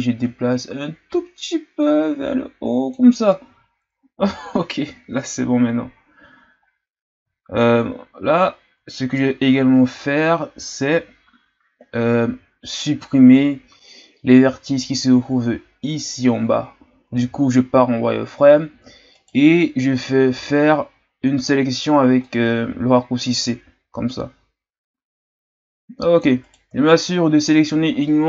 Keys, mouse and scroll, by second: 6.8-8.5 scroll down 7, 8.5-11.2 scroll down 2, 17.2 z, 19.1-20.3 right drag, 20.3 c, 26.8-27.2 shift+scroll down 4.